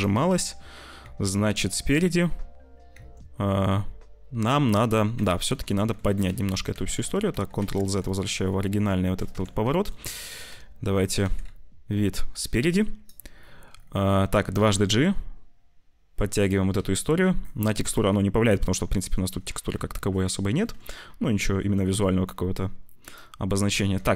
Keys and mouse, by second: 0.1 z, 0.9 `, 1.4 z, 2.9 Tab, 5.1 Tab, 5.4 z, 5.7 middle click, 6.3 ctrl+z, 6.5 ctrl+z, 6.7 ctrl+z, 6.9 ctrl+z, 7.3 ctrl+z, 7.5 ctrl+z, 8.1 click, 9.0 click, 9.2 Tab, 9.7 shift+click, 10.0 click, 10.4 z, 11.2 ctrl+s, 11.3 `, 12.3 z, 14.5 g, 16.7 z, 19.0 click, 20.4 ctrl+shift+b, 23.4 s, 23.7 Tab.